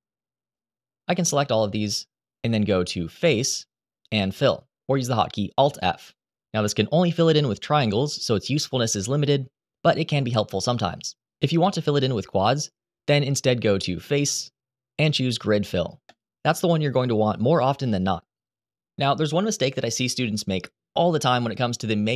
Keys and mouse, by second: 0.4 click, 1.7 shift+click, 3.0-5.5 drag, 11.2 ctrl+z, 14.0-15.9 drag.